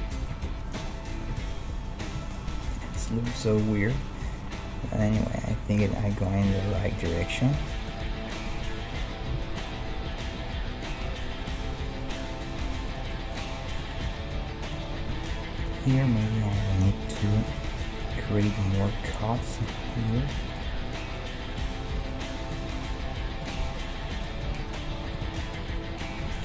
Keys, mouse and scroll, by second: 1.3 KP_1, 1.9-7.0 middle drag, 6.8-8.9 right drag, 7.4-11.6 middle drag, 8.4 KP_3, 11.0 e, 13.1-14.7 middle drag, 14.0 g, 15.1 ctrl+Tab, 15.9-17.6 right drag, 17.5 f, 17.6 middle click, 18.2 a, 22.0 k, 24.6 ctrl+Tab, 26.2 g.